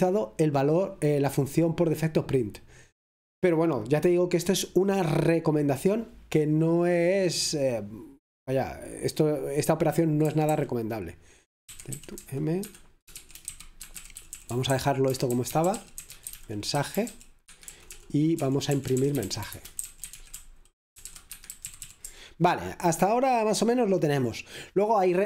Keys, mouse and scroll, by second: 0.0-1.2 drag, 10.3 typing, 12.6 Escape, 12.6-22.3 typing.